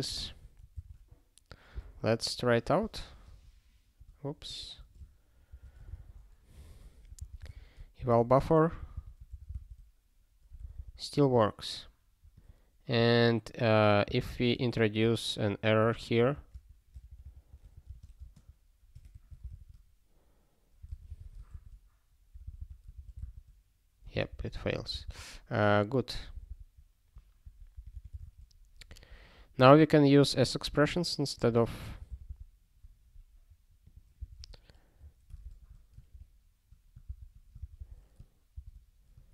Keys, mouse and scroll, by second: 0.2 ctrl+alt+@, 0.8 ctrl+w, 2.8 ctrl+6, 2.9 alt+^, 4.6 ctrl+/, 5.5 alt+^, 5.9 ctrl+s, 7.2 alt+x, 8.0 Return, 8.8 super+b, 10.7 super+b, 12.3 click, 14.0 Return, 14.7-19.1 typing, 19.5 ctrl+s, 20.9 alt+x, 21.5 Return, 22.5 super+b, 25.1 ctrl+g, 26.3 super+b, 27.4 ctrl+a, 27.7 ctrl+k, 27.9 ctrl+k, 28.2 ctrl+s, 29.7 scroll down 1, 31.3 click, 32.0 alt+b, 32.2 alt+b, 33.8 click, 34.3 BackSpace, 34.9 ', 35.4 ctrl+alt+@, 36.1 ctrl+f, 37.0 ctrl+b, 37.7 ctrl+x, 38.5 ctrl+d.